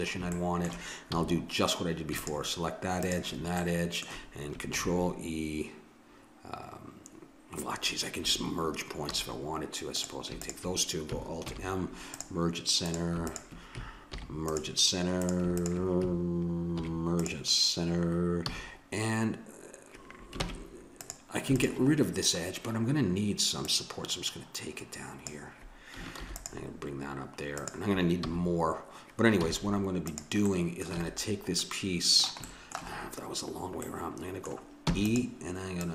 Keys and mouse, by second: 1.1 a, 2.2-4.8 alt+drag, 4.8 ctrl+e, 9.1 a, 9.9-11.5 drag, 11.5 alt+m, 12.9-14.2 drag, 14.2 alt+m, 16.8 alt+m, 18.5 a, 20.5 ctrl+Tab, 21.6-23.3 right drag, 23.7-25.3 right drag, 25.3 click, 26.2 ctrl+r, 28.2 a, 29.7 z, 30.5-31.7 middle drag, 30.9 a, 34.9 e, 35.8-35.9 drag.